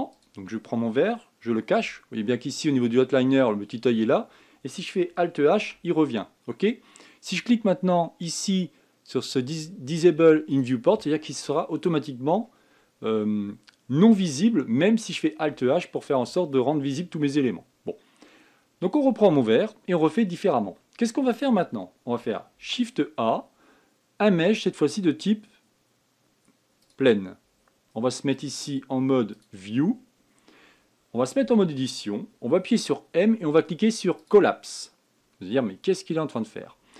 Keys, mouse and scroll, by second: 0.9 click, 2.5 h, 6.3 alt+h, 11.2 click, 12.4 scroll down 2, 12.8 scroll up 1, 15.5-16.5 scroll down 1, 18.5-19.5 scroll up 1, 19.5-20.8 scroll down 1, 20.8-21.6 scroll up 4, 21.6 scroll down 1, 23.3 shift+a, 29.1-30.7 drag, 30.7 scroll down 1, 32.2 Tab, 33.6 m.